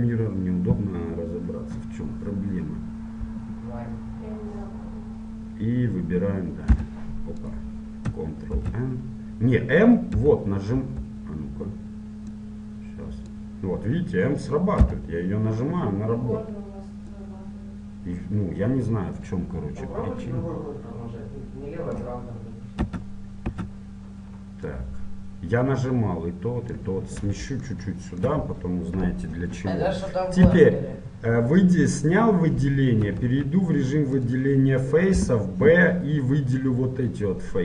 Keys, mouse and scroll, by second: 0.0 space, 8.7 ctrl+n, 12.5-19.3 drag, 12.5 m, 17.3 m, 23.0 a, 23.6 a, 24.9-26.9 drag, 27.9-30.6 middle drag, 30.6 a, 34.4 ctrl+Tab.